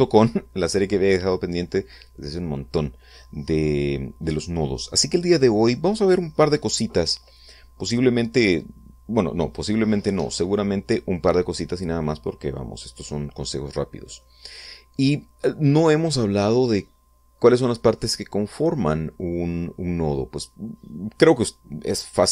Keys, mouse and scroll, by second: 13.9-14.4 scroll up 2, 14.7-16.4 middle drag, 17.3-18.6 middle drag, 21.2 scroll down 2, 21.8 scroll up 2.